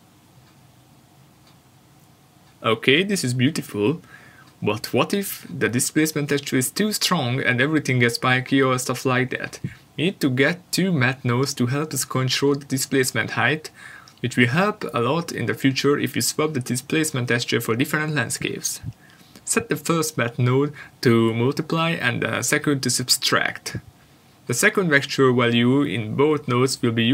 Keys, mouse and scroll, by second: 0.3 ctrl+shift+click, 2.6-4.9 scroll up 1, 5.8 click, 11.1 shift+a, 11.5 click, 12.1 shift+d, 12.9 click, 13.9 click, 14.7 click, 15.1 click, 15.7 click.